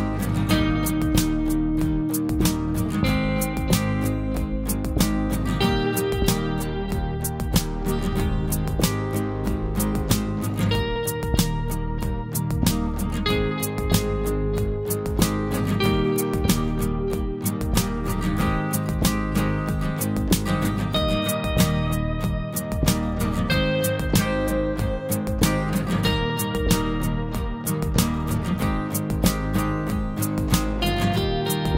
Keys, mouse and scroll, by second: 2.2 scroll up 1, 4.9 click, 5.2 click, 5.4 typing, 6.8-7.3 scroll down 2, 6.9 typing, 7.3 scroll up 1, 8.4 click, 12.3 scroll up 1, 12.9 typing, 15.3 scroll up 1, 15.3 click, 16.4 right click, 17.3 click, 18.1 scroll down 1, 20.3-21.0 scroll up 1, 21.0 click, 22.3 scroll down 1, 25.7 click, 26.4 scroll down 1, 27.8 scroll up 1, 30.3 click, 30.4 click, 31.3 scroll down 1.